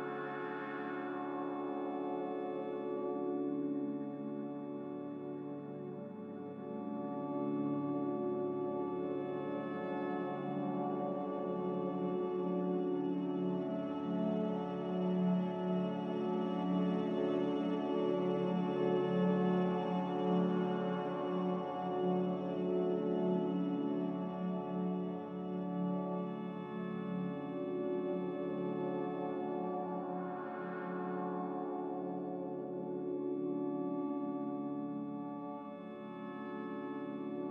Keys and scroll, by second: 2.6-4.7 typing, 8.6 ctrl+z, 11.1 ctrl+v, 11.4 ctrl+z, 11.6 ctrl+c, 13.4-14.1 typing, 31.7 ctrl+c, 34.9 ctrl+v, 35.3 Insert, 35.3 Up, 36.1-36.8 typing.